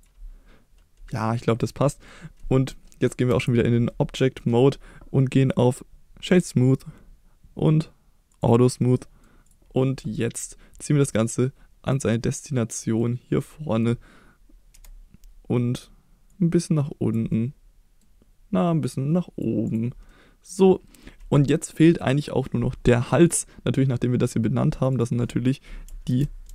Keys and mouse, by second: 2.1 middle click, 3.3 Tab, 3.9-4.4 middle drag, 5.6-8.3 right drag, 8.3 click, 8.8-9.2 middle drag, 9.5 click, 9.8 middle drag, 10.2 click, 11.9-12.8 drag, 13.0-13.8 middle drag, 14.7 KP_1, 16.3 click, 17.3-18.0 middle drag, 19.7 click, 20.1-21.0 middle drag, 23.2 click, 24.7 click, 24.9-26.5 drag.